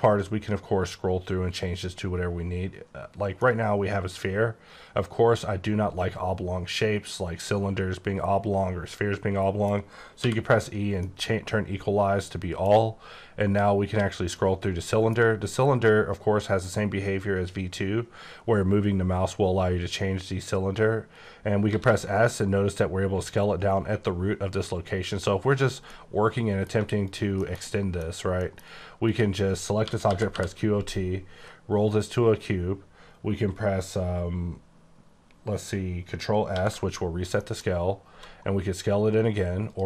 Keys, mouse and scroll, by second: 0.1-1.2 scroll down 3, 3.0 scroll, 3.4 middle click, 11.0 middle click, 13.0-13.5 scroll up 1, 13.5-14.3 scroll down 2, 14.3 middle click, 21.7 s, 25.6 click, 25.9 middle click, 27.1 shift+click, 27.4 shift+middle click, 27.6 shift+scroll down 1, 27.7 middle click, 28.4 middle click, 29.1 click, 29.9-30.3 typing, 31.2-32.0 scroll down 3, 32.0 scroll up 3, 36.4 ctrl+s, 37.4 middle click, 38.1 s, 39.7 click.